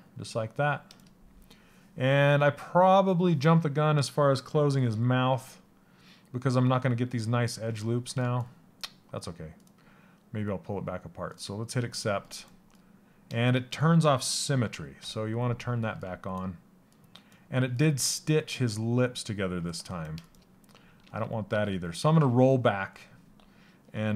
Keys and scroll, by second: 21.1 ctrl+z.